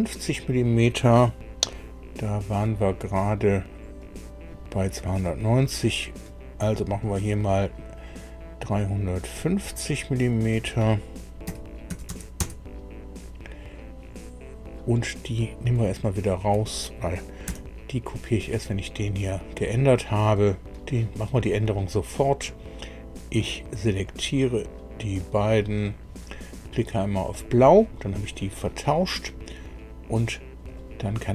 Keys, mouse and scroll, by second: 4.0 click, 7.0 click, 10.3 click, 11.4 KP_3, 11.9 KP_5, 12.1 KP_0, 12.4 KP_Enter, 15.4 click, 16.2 shift+click, 17.4 Delete, 20.4 click, 21.7-22.2 scroll up 1, 24.0 click, 25.8 click, 27.3 click, 30.6 click.